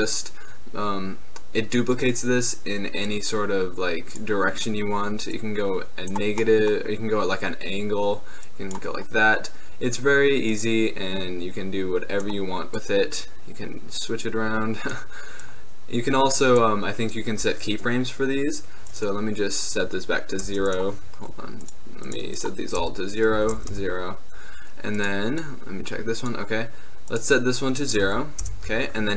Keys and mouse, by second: 0.4-2.2 middle drag, 3.1-7.4 drag, 7.4-8.5 middle drag, 8.5-12.8 drag, 14.6 middle click, 15.5-20.8 middle drag, 21.7-29.1 middle drag.